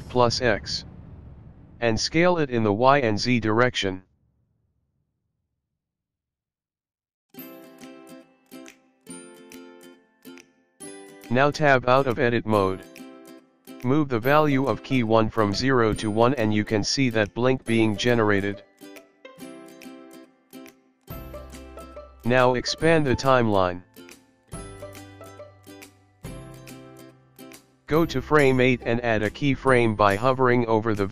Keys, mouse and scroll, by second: 3.5 s, 10.0-11.0 scroll down 6, 12.7 Tab, 17.2 click, 20.5 scroll down 3, 21.4-21.7 scroll up 1, 22.4 click, 24.0 click.